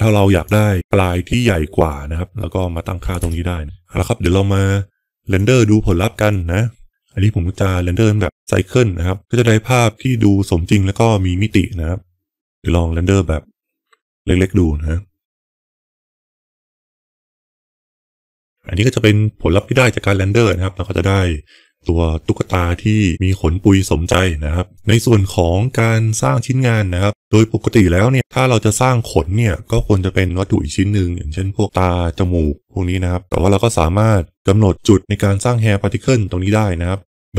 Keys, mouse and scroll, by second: 0.3-3.6 drag, 5.1 click, 6.1-6.9 drag, 12.4 F12, 33.2 click.